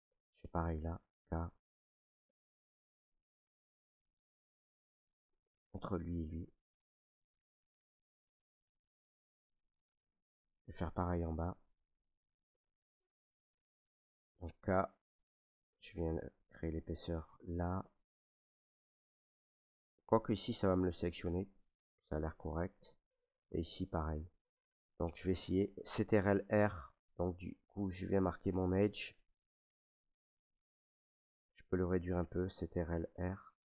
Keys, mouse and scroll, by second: 0.2 middle click, 1.1 k, 2.1 click, 3.5 Escape, 4.3 k, 5.3-6.9 drag, 6.9 Escape, 8.5-9.9 drag, 9.9 Return, 10.2 middle click, 11.2 middle click, 11.4 middle click, 11.4 middle click, 12.1-12.4 scroll, 14.4 k, 16.9 click, 21.2 Escape, 21.9 middle click, 22.0 middle click, 23.0-25.5 middle drag, 26.3 ctrl+r, 26.9 click, 28.7 click, 29.1 middle click, 29.1 middle click, 29.2 middle click, 31.0 shift+middle click, 31.2 shift+middle click, 31.6 ctrl+z, 33.0 ctrl+r.